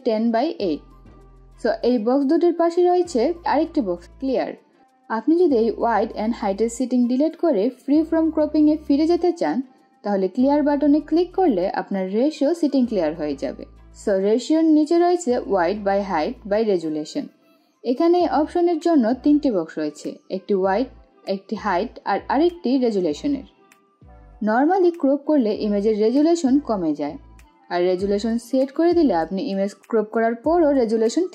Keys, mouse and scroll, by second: 5.1 click, 8.1 click, 10.4-16.3 drag, 20.6 click, 30.5-31.3 drag.